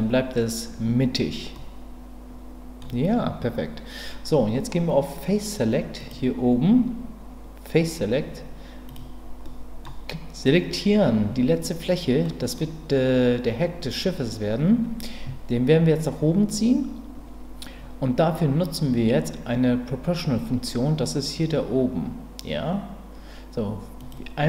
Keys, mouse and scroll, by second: 1.5-2.8 middle drag, 6.0 click, 8.9 click, 9.5 middle click, 12.2 middle click, 24.0 click.